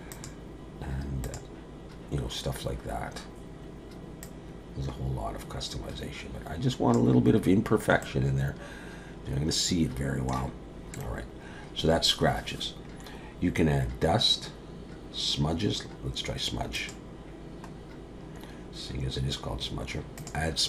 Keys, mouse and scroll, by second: 4.2 click, 8.0 middle click, 11.1-12.4 scroll up 7, 12.4-13.9 scroll down 1, 16.8 click, 17.8-19.2 scroll down 2, 20.2 click.